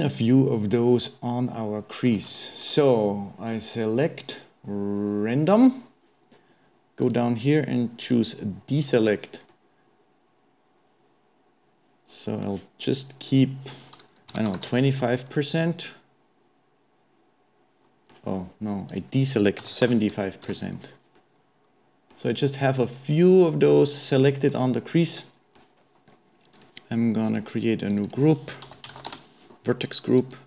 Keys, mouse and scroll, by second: 2.4-3.6 shift+middle drag, 3.6-6.7 drag, 7.0-9.5 drag, 9.5-12.5 middle drag, 13.3-15.5 drag, 15.5-18.5 middle drag, 18.9-21.2 drag, 21.2-26.5 middle drag, 26.5 click, 27.3-30.2 drag.